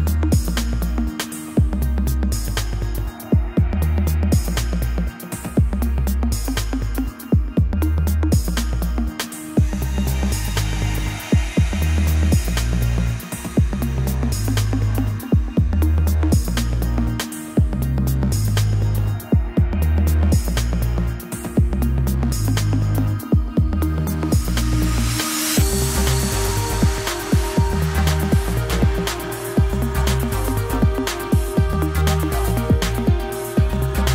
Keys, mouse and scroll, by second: 1.7 alt+middle click, 2.3 g, 3.0 s, 5.3 o, 5.6 g, 6.5-7.0 shift+middle drag, 7.0 click, 7.3 shift+middle drag, 7.5 scroll up 4, 7.7 Tab, 7.9 shift+middle drag, 8.2-9.0 scroll up 3, 9.0 k, 20.8-21.5 scroll down 2, 21.5 y, 22.0 g, 22.8 ctrl+z, 23.6 click, 23.9 g, 24.8 shift+middle click, 25.7 click, 27.2 click, 29.8 click, 31.2 click, 32.8 shift+middle drag, 33.0-33.3 scroll down 2, 33.3-33.9 shift+middle drag, 33.9-34.1 scroll up 4.